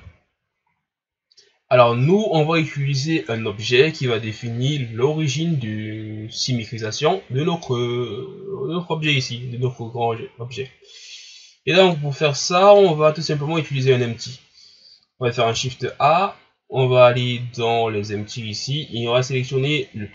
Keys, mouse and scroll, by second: 0.8-1.5 scroll down 2, 1.5 ctrl+scroll down 1, 11.8 click, 12.7-13.4 drag, 13.4 ctrl+scroll down 3, 15.5 shift+a.